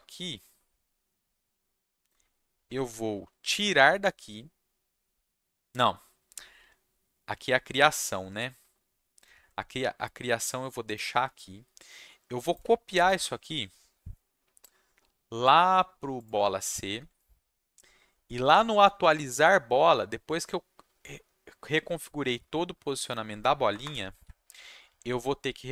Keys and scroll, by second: 13.0 ctrl+c, 23.7 Return, 23.8 Return, 24.1 ctrl+v.